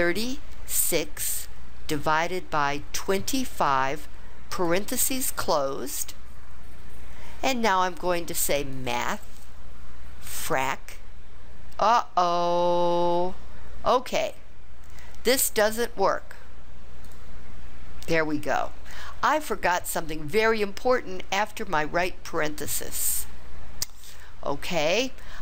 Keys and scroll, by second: 0.7 6, 2.9 2, 3.5 5, 4.5 ), 10.4 Return, 15.6 Delete, 17.0 Delete.